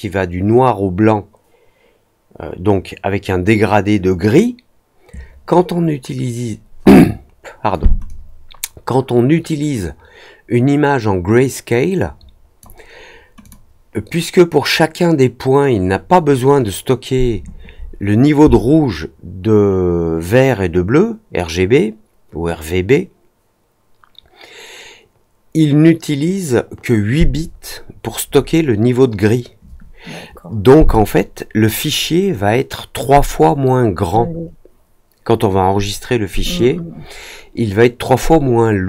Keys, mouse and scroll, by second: 8.0-12.5 drag, 13.4 click.